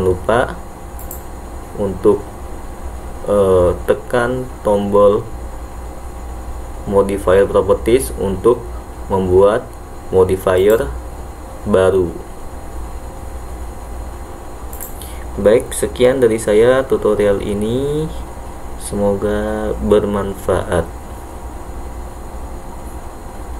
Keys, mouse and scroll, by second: 1.1 click, 10.7-14.0 drag, 14.8 click.